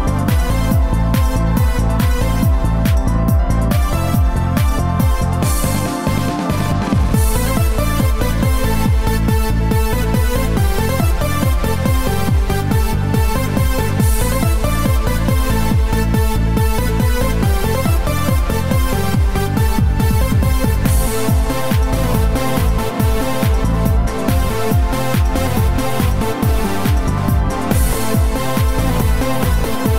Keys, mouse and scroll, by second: 0.2 click, 1.5 click, 3.5 click, 6.4 shift+d, 10.9 click, 28.4 shift+right click.